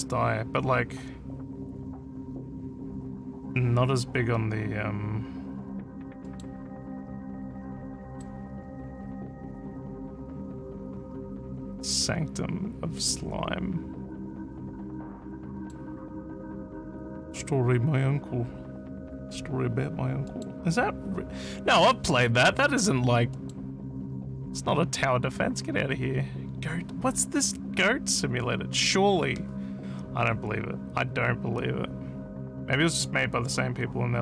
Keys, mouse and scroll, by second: 6.2 middle click, 8.1 middle click, 15.5 middle click, 20.3 middle click, 23.4 middle click.